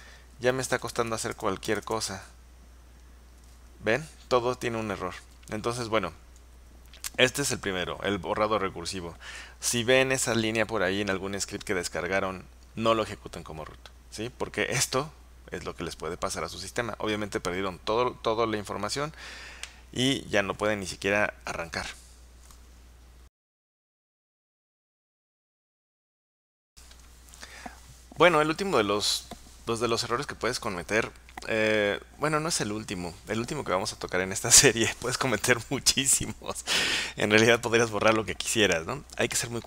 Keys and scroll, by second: 0.0-2.8 typing.